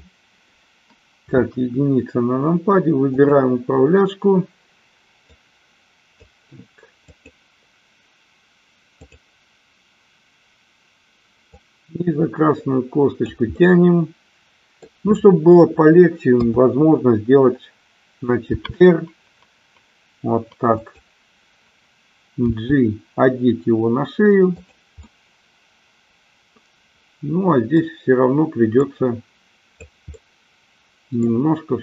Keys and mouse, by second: 1.6 KP_1, 3.1-4.4 drag, 5.2-6.3 drag, 6.9-8.3 drag, 11.4-13.3 drag, 13.6-14.9 middle drag, 16.2 KP_3, 18.4 r, 20.8 click, 23.6 g, 25.1-27.7 middle drag, 28.7-29.7 drag, 30.2-31.2 middle drag.